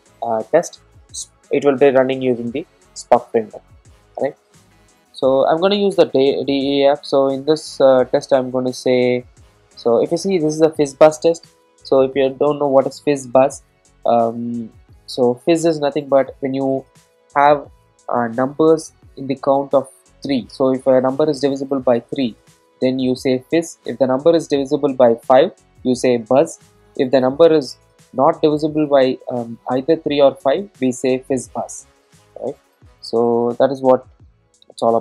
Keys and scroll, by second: 33.2 super+e.